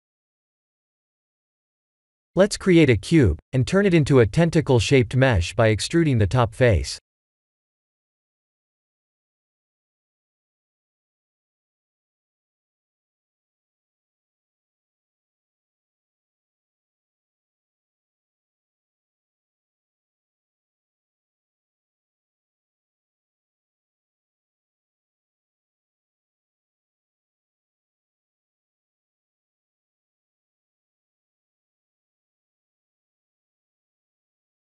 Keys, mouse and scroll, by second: 0.0 middle click, 0.5 click, 2.2 shift+a, 4.3 KP_1, 5.6 Tab, 5.9 middle click, 6.4 3, 7.1 click, 8.2 KP_1, 8.8 e, 9.2 click, 9.4 g, 9.9 click, 11.0 KP_1, 12.4 g, 12.8 click, 13.6 click, 13.7 g, 14.7 click, 16.3 KP_3, 17.8 g, 19.1 click, 20.3 click, 20.5 g, 21.1 click, 21.6 s, 24.1 click, 24.4 KP_3, 26.5 g, 27.2 click, 28.2 Tab, 29.7 ctrl+1, 31.5-34.6 middle drag.